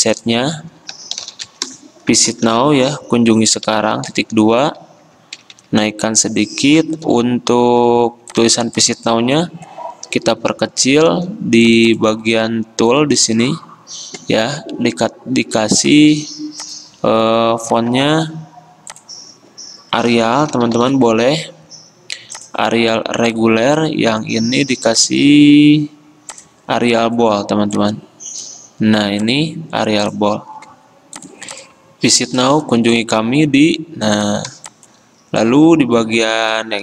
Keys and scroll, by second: 1.1-4.7 typing, 4.2 Return, 4.7 ctrl+a, 5.5 alt+Up, 5.7 alt+Up, 5.8 alt+Up, 7.2 alt+Down, 10.5 ctrl+t, 18.1 ctrl+a, 20.3-21.0 typing.